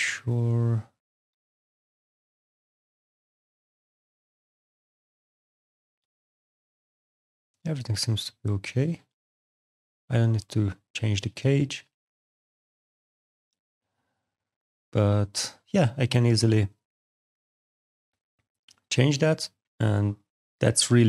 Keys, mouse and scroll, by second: 1.5 click, 2.2 alt+click, 5.4 alt+right click, 5.8 alt+middle click, 6.2 alt+click, 8.6 alt+middle click, 9.0 alt+click, 10.2 alt+middle click, 10.5 alt+click, 10.8 click, 11.0 right click, 11.3 click, 11.7 right click, 14.7 click, 16.3 click, 17.3 click, 18.5 click, 19.5 alt+right click, 20.0 alt+click.